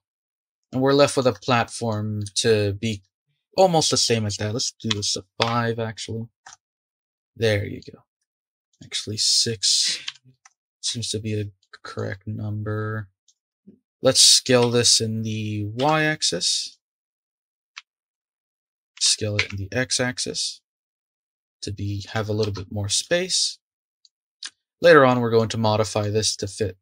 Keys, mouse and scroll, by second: 3.9-6.7 drag, 7.1-8.0 middle drag, 8.0 scroll down 2, 8.2 shift+middle click, 8.7-11.6 drag, 11.6-13.3 middle drag, 13.3 click, 14.6 Tab, 17.7 s, 18.9 s, 22.4 Tab, 22.9 drag, 23.3-24.2 middle drag, 24.2 scroll down 4, 24.5-26.8 shift+middle drag.